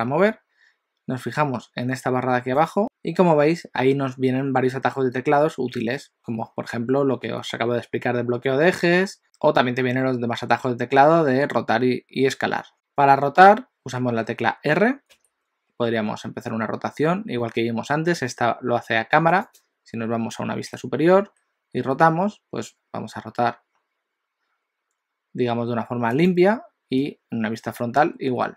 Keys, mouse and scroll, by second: 12.7 click, 15.2 r, 20.7 KP_7, 21.8 r, 27.0 KP_1, 28.1 r.